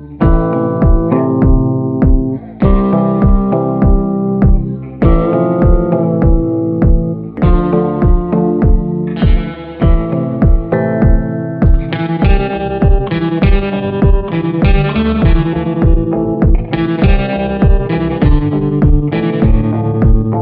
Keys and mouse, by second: 0.0 [, 0.1 [, 2.1 ctrl+z, 2.6 click, 3.4 ctrl+z, 4.2 click, 4.5 ], 4.9 ], 5.0 click, 5.3 click, 5.5 click, 5.8 click, 6.0 click, 6.2-7.2 drag, 7.5 click, 8.9 click, 9.6 ctrl+z, 9.9 [, 10.3 [, 10.4 click, 11.1 [, 11.3 click, 12.0 ctrl+z, 12.1 [, 13.5 a, 14.7-16.1 middle drag, 17.4 middle click, 17.6 middle click, 17.9 middle click, 18.2 shift+middle click, 18.6-20.1 middle drag, 20.3 middle click.